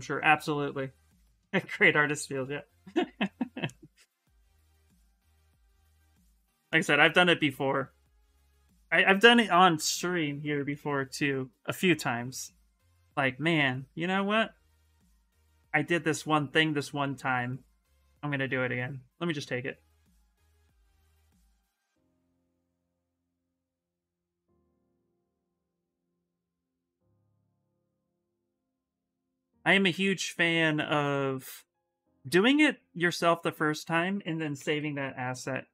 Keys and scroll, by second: 10.1-12.0 typing, 16.4 s, 25.5 s, 28.3-30.3 typing, 33.9-35.0 typing.